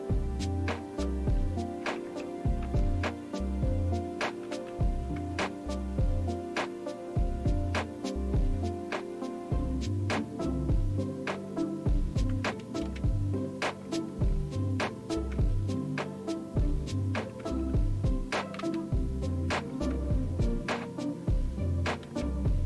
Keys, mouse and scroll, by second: 0.2 Up, 0.6 Up, 1.8 space, 2.0 Return, 2.6 Return, 4.5 Down, 5.2 Down, 12.8 space, 13.8 Return, 15.3 Return, 17.4 Return, 18.6 Down, 19.9 Return, 22.0 Down.